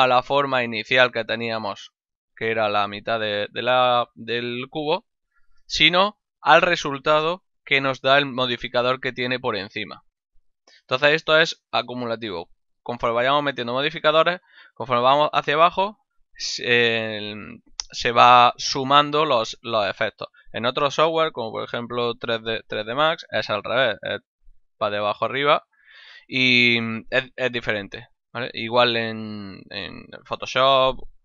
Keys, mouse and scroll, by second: 0.8 click, 2.2 middle click, 6.0 click.